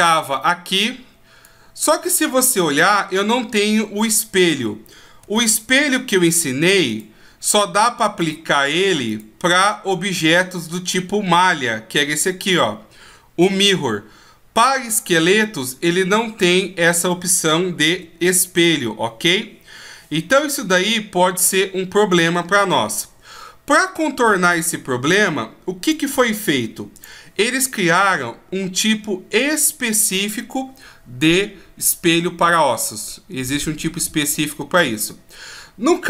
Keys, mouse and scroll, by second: 4.4 click, 5.3 shift+a, 8.2 click, 15.0 right click, 16.8 right click, 17.9 x, 21.7-24.6 scroll up 1, 24.6 right click, 25.8 click.